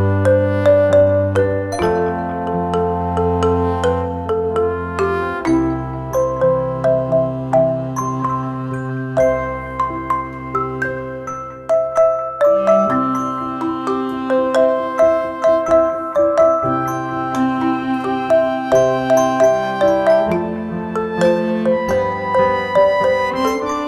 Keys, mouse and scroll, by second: 2.1 right click, 3.3 click, 5.1 alt+scroll up 1, 5.7-9.3 drag, 11.1 click, 17.4-20.1 drag, 20.1 alt+scroll down 1, 20.8 click, 21.4 right click, 22.0-23.8 drag.